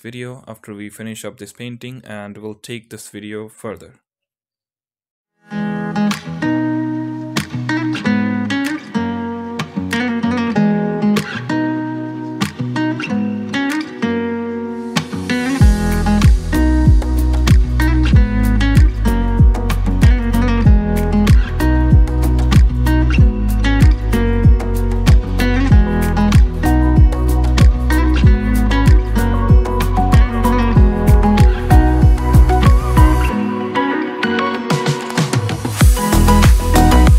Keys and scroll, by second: 3.0 Tab, 13.8 Tab, 18.9 Tab, 19.7 ], 19.9 ], 20.2 ], 20.4 ctrl+z, 21.5 ctrl+z, 21.5 ], 21.5 ], 21.7 ], 22.1 ctrl+z, 22.4 ctrl+z, 22.4 ], 23.4 [, 24.1 ctrl+z, 24.5 ctrl+z, 27.0 ctrl+z, 27.5 ctrl+z, 27.5-28.6 typing, 28.4 ctrl+z, 29.5 ctrl+z, 29.6 Tab, 32.7 alt+q.